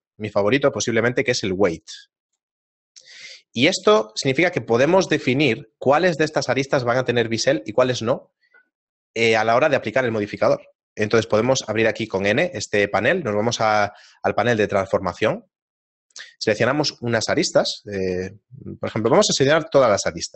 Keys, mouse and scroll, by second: 2.3 click, 4.9 shift+middle click, 5.4 ctrl+middle click, 13.4 middle click, 14.7 click, 16.7 ctrl+Tab, 17.7 right click, 18.9 a, 19.0 a.